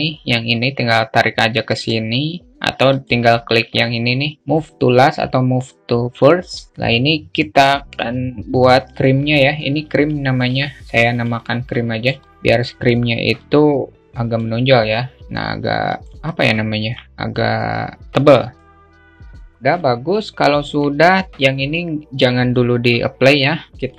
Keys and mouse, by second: 0.0-1.3 drag, 9.5 alt+shift+middle click, 10.4 s, 10.8 alt+middle click, 11.7-12.3 alt+shift+middle drag, 12.8-14.0 drag, 14.1 s, 15.7-16.6 alt+middle drag, 18.0-19.3 drag, 19.3 alt+middle click, 20.0-22.9 alt+middle drag, 23.1-23.9 alt+middle drag.